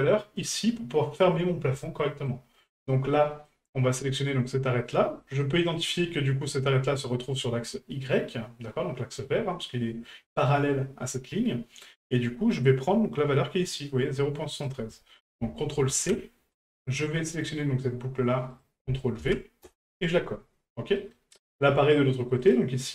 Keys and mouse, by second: 0.4 right click, 2.0 shift+middle click, 3.2 middle click, 14.6-16.6 drag, 17.3 right click, 18.6-19.7 ctrl+drag, 21.0 middle click, 22.4 right click.